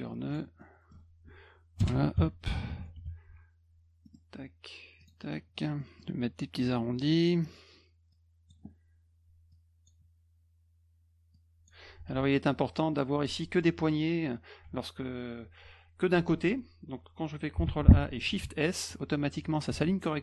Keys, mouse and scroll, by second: 0.3 click, 0.6 middle click, 1.8 Return, 2.9 F2, 4.0 middle click, 5.0 click, 5.8 middle click, 7.0 click, 8.1 click, 9.5 click, 11.3 click, 12.1 ctrl+a, 17.6 ctrl+a, 18.4 shift+s, 19.7 ctrl+z.